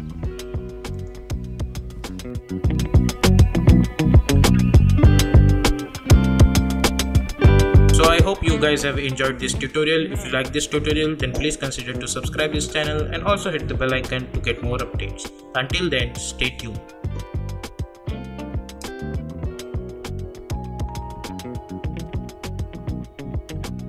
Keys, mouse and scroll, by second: 0.9 click.